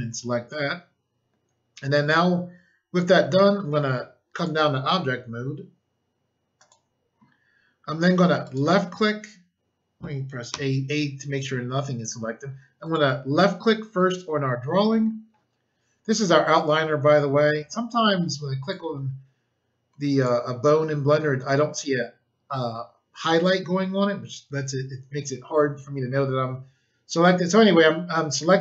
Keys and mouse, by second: 4.3 click, 4.4 click, 6.5 click, 8.4 click, 8.5 click, 10.4 a, 12.8 click, 18.6 click.